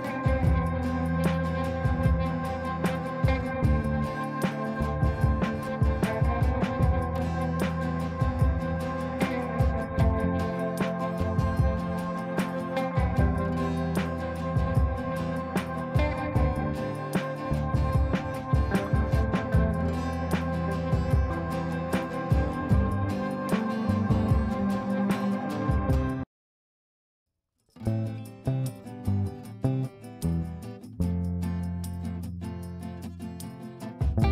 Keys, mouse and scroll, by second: 1.4-3.4 typing, 3.7 ctrl+space, 5.8-8.7 drag, 9.6 l, 10.3 click, 10.3 click, 16.5-18.8 drag, 19.9 right click, 21.7 click, 23.2 ctrl+space, 24.2-32.8 drag, 32.8 click, 34.0-34.3 drag.